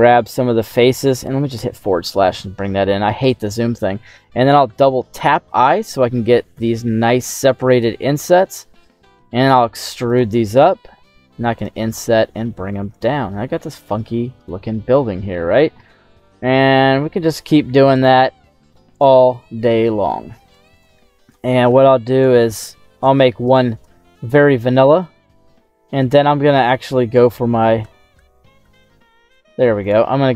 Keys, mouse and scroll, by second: 0.0 shift+middle click, 0.5 middle click, 1.5 /, 2.2 middle click, 3.1 shift+right click, 4.6 i, 4.8 i, 7.6 click, 8.2 e, 10.0 click, 10.6 i, 11.5 click, 11.8 e, 12.8 click, 14.3 right click, 14.8 middle click, 16.3 i, 17.8 click, 18.1 e, 18.9 click, 19.5 right click, 19.9 middle click, 20.7 shift+right click, 21.1 middle click, 22.0 shift+right click, 22.4 middle click, 23.4 shift+right click, 23.8 middle click, 25.1 i, 25.2 i, 27.7 i, 28.1 i, 28.6 i, 29.7 click, 30.2-30.3 scroll up 2.